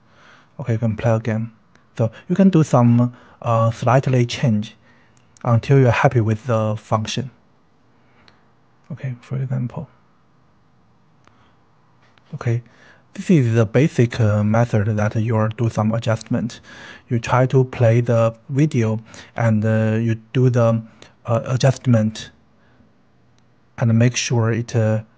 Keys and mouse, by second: 0.0-1.0 drag, 1.3 KP_3, 2.1 KP_3, 2.5 r, 3.8 click, 4.0-5.4 typing, 4.7 click, 5.0 drag, 5.6-6.5 drag, 6.6 click, 6.8-7.7 typing, 7.9-8.8 drag, 8.9 g, 9.6-10.2 drag, 10.2-12.7 typing, 10.5-10.8 drag, 11.1 click, 11.9 click, 12.6 click, 12.9-13.7 drag, 13.9 click, 14.2 shift+d, 14.2-14.7 drag, 14.7 shift+click, 15.0-18.4 drag, 18.5 click, 18.8-22.0 typing, 19.4 drag, 21.9 click, 22.2-23.0 drag, 23.1-23.5 drag, 23.7 click, 24.2-25.1 drag.